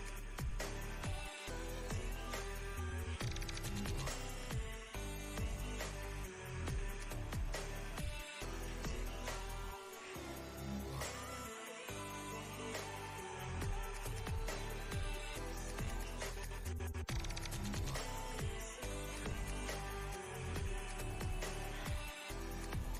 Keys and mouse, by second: 0.8 ctrl+space, 1.0-1.6 ctrl+click, 1.3 ctrl+space, 1.7-2.4 click, 2.1 space, 2.5-3.7 ctrl+click, 3.0 ctrl+space, 3.2 click, 3.6 space, 4.0 click, 7.2-13.7 drag, 9.8-12.4 drag, 17.1 click, 17.4 ctrl+space, 17.5-18.8 ctrl+click, 17.9 ctrl+space, 19.5-22.9 drag.